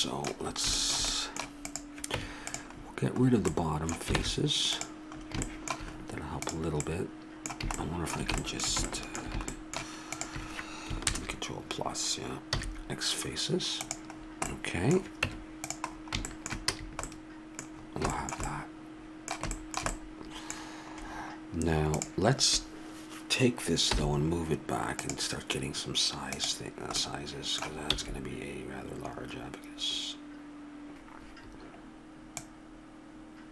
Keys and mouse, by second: 1.7-3.5 drag, 2.1 Tab, 4.2 ctrl+Tab, 6.5 right click, 7.0-8.1 middle drag, 10.1 right click, 11.1 ctrl+KP_Add, 12.6 x, 15.2 Tab, 16.7 a, 22.0-23.8 right drag, 23.9 m, 26.4-28.5 drag, 27.9 s, 32.4-33.5 drag.